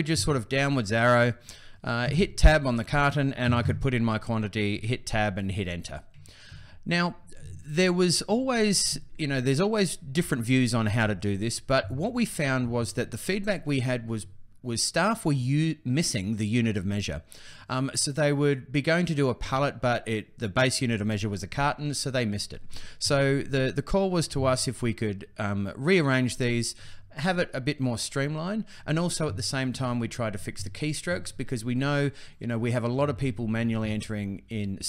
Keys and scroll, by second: 1.8 Tab, 4.4 Tab.